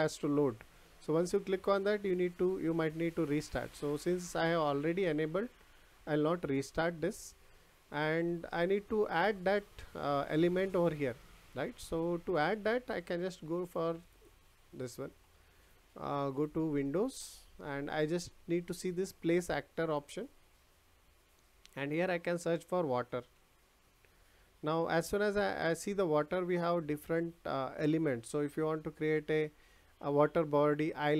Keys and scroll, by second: 22.9 w.